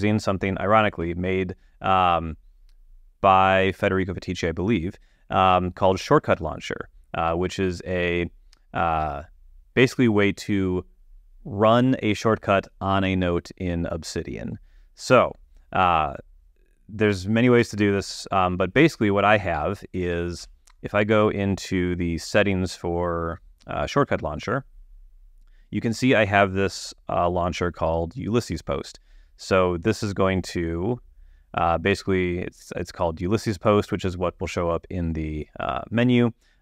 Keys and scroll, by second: 0.3 super+,, 20.0 ⟲.